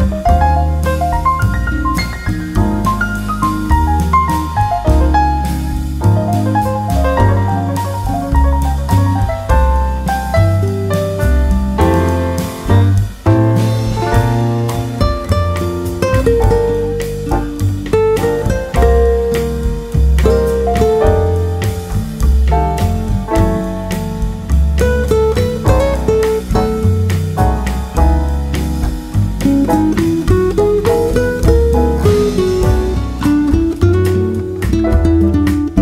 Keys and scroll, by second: 6.3 Right, 27.2 Right.